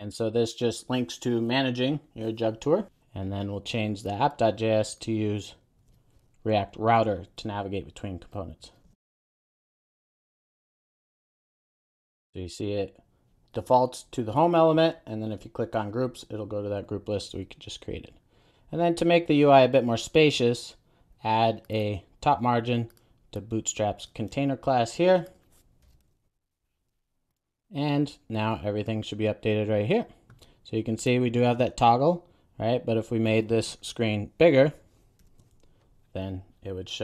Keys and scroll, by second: 5.9 super+a, 10.8 Return, 11.4 super+s, 26.2 super+v, 26.6 super+s.